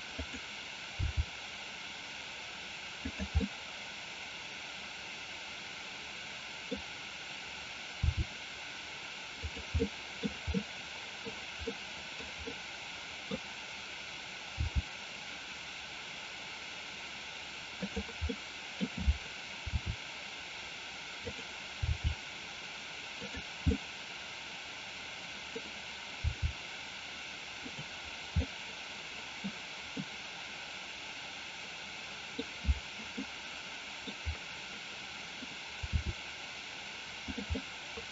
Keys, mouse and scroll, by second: 0.2 click, 1.1 g, 3.1 click, 3.5-6.8 middle drag, 8.1 r, 9.5 click, 9.7 middle click, 10.6 middle click, 11.7 middle click, 12.6 middle click, 14.6 g, 17.8 click, 18.3 middle click, 19.7 r, 21.3 click, 22.0 g, 23.3 click, 23.7-25.6 middle drag, 26.4 g, 27.7 click, 28.5-29.6 middle drag, 29.9-32.3 middle drag, 33.2-34.1 middle drag, 36.0 r, 37.3 click, 37.6-38.1 middle drag.